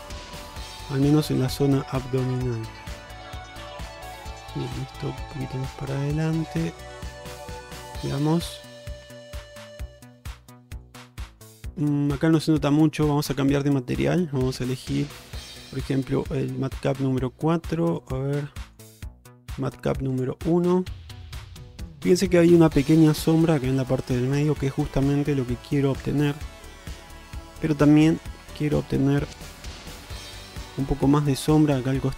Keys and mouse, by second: 0.7 shift+middle click, 1.2-2.5 drag, 3.5-4.8 drag, 5.0 shift+middle click, 5.6 click, 6.6 click, 7.6 alt+z, 8.1-8.7 middle drag, 9.1 Tab, 9.9 shift+middle drag, 10.2 middle click, 11.1-11.5 alt+middle drag, 11.7 middle drag, 12.1-13.1 middle drag, 13.4 click, 14.7-16.8 drag, 18.2-20.5 drag, 21.1-22.0 middle drag, 25.0-27.7 middle drag, 28.2 click, 28.5 Tab, 29.0-29.7 middle drag, 30.6 click, 31.0 middle click, 31.9 middle click.